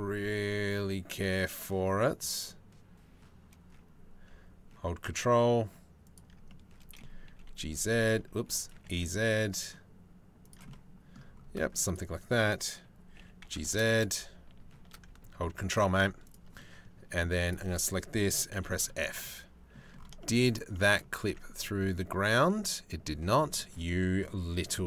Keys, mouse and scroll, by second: 6.1 click, 6.9 g, 8.3 e, 10.3 click, 12.8 g, 15.8 click, 16.1 click, 17.1-18.1 drag, 18.1 f, 20.8 Tab, 23.8-24.8 drag.